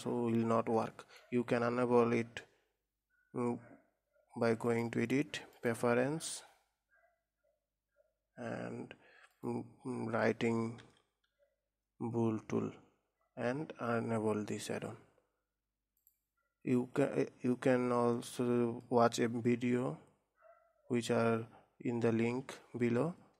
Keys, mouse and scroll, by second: 0.0-1.3 drag, 1.3-4.3 middle drag, 5.1-8.4 drag, 17.9-18.4 scroll down 2, 18.7-21.7 middle drag.